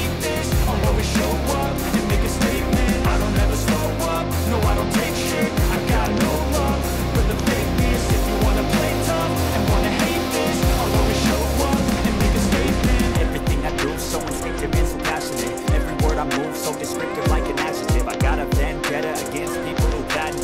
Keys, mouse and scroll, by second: 1.2 click, 2.2 Escape, 2.7-3.7 scroll, 5.2 Escape, 6.1 Escape, 6.1 click, 7.5 ctrl+click, 11.3 click, 12.0-12.9 scroll, 12.9 middle click, 13.5-14.2 scroll, 14.2 click, 16.2 click, 17.6-18.7 drag.